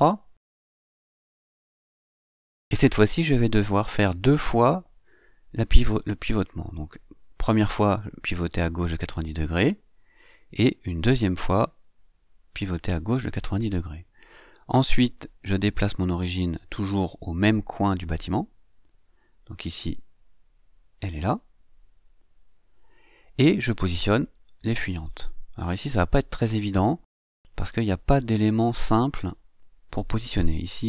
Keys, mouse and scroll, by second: 2.0 click, 5.5 right click, 7.1 click, 11.9 right click, 13.2 click, 16.2-23.1 drag, 28.0-30.7 drag.